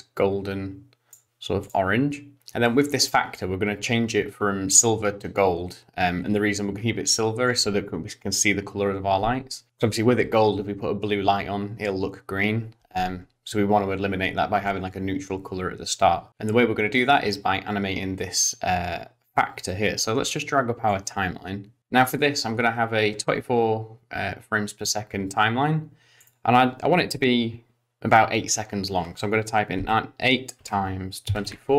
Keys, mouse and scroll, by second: 1.6 click, 3.3 click, 20.9 click, 26.3 click.